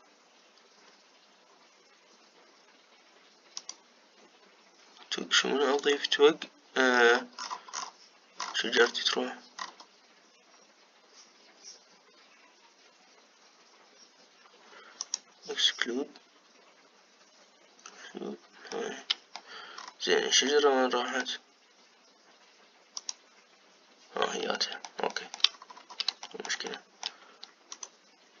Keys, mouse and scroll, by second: 7.6-9.1 scroll down 18, 9.1-10.2 scroll up 8, 10.2-11.1 scroll up 6, 11.1-13.3 scroll up 1, 15.7-19.5 drag, 19.5 middle click, 20.5-21.2 scroll down 1, 21.2-23.6 middle drag, 23.6-25.3 drag, 25.3 middle click, 26.2-26.9 scroll up 4, 26.9-28.4 shift+middle drag.